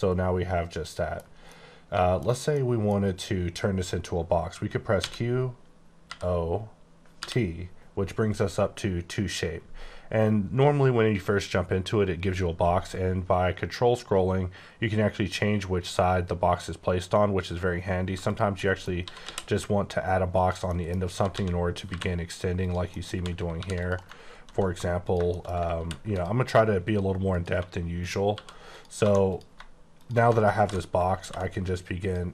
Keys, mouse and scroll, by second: 1.4 middle click, 2.5 middle click, 3.0 scroll up 1, 4.9 q, 6.0 o, 7.1 t, 12.9 t, 13.5-14.0 ctrl+scroll down 1, 14.0-15.6 ctrl+scroll down 4, 15.6-16.8 ctrl+scroll up 5, 17.3-18.3 ctrl+scroll up 3, 18.3 ctrl+click, 18.6 middle click, 19.0 typing, 20.3 click, 20.7 middle click, 21.1-21.9 typing, 22.8 middle click, 23.1 Left, 23.6 ctrl+r, 23.8 ctrl+click, 24.0 right click, 24.3 ctrl+b, 25.1 click, 25.2 shift+middle click, 25.5 scroll up 3, 25.7 ctrl+t, 26.1 ctrl+click, 27.4 3, 27.9 click, 28.3 e, 28.7 click, 28.9 2, 29.2 click, 30.6 ctrl+super+b, 32.0 click.